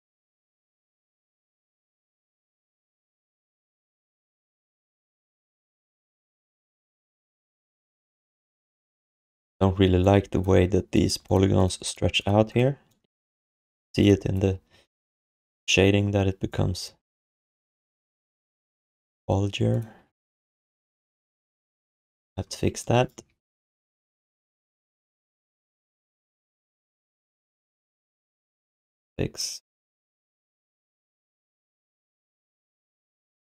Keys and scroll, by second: 3.0 3, 4.5 1, 9.2 alt+q, 9.8 alt+q, 13.4 3, 20.0 1, 27.8 q.